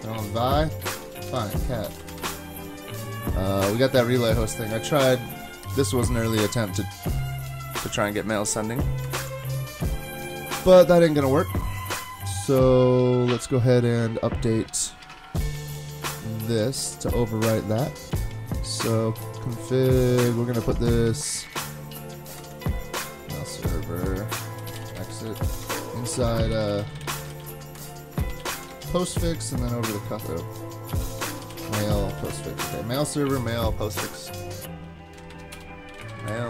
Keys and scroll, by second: 0.8 Up, 1.0 ctrl+a, 1.3 Delete, 1.5-2.4 typing, 4.4 super+Tab, 5.3 shift+super+Tab, 9.0 super+Tab, 22.4 super+Tab, 24.4-29.0 typing, 30.7-33.1 typing, 33.4 super+Tab, 35.3 shift+super+Right, 35.5-36.4 typing.